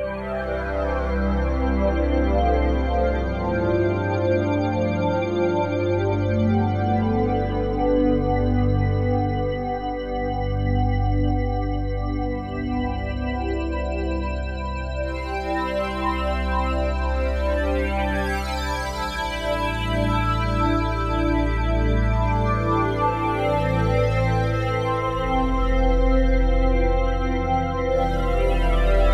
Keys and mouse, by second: 1.3 click, 2.8-5.3 drag, 7.0-7.5 typing, 8.2 click, 8.9-9.9 typing, 10.1 click, 11.9-12.9 alt+shift+drag, 14.1-15.1 typing, 14.5 click, 17.0 typing, 17.6 click, 19.1-20.6 drag, 20.6 d, 22.3 click, 22.9-29.1 drag.